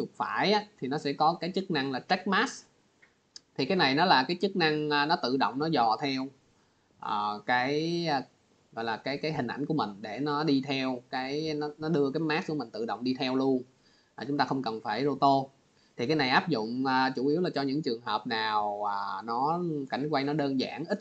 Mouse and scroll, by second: 3.7 right click.